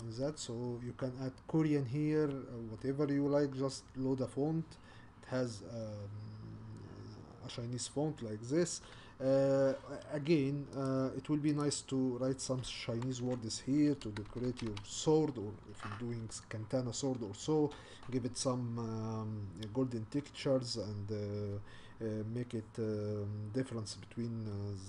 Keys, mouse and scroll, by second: 0.0-5.1 drag, 5.1-6.0 scroll up 3, 6.0-6.4 scroll up 2, 10.8 click, 11.6 click, 13.2 Tab, 14.0 BackSpace, 14.3 BackSpace, 14.5 BackSpace, 14.7 BackSpace.